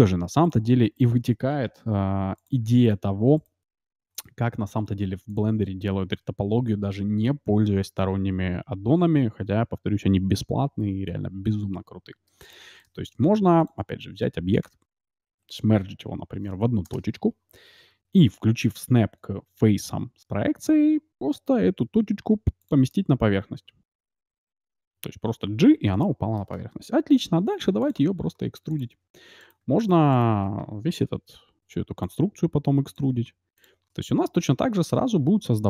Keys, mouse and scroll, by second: 0.5-2.6 right drag, 1.9 g, 2.6 x, 3.4-5.8 right drag, 4.5 x, 5.3-7.1 drag, 7.4 t, 8.4 t, 9.0 t, 10.7 t, 12.4-14.1 drag, 12.8 shift+a, 14.6 Tab, 15.7 alt+m, 21.6 g, 22.9-24.7 middle drag, 25.7-27.7 middle drag, 27.3 e, 28.0 e, 29.4-31.9 right drag, 31.1 e, 32.2 e, 33.0 e, 33.9-35.6 middle drag, 35.0 Tab.